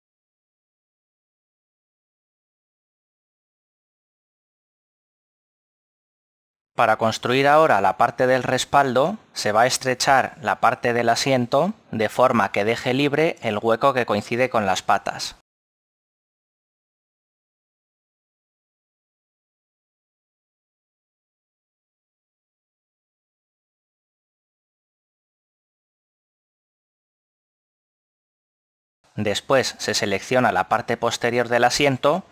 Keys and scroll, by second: 15.9 g, 16.5 x.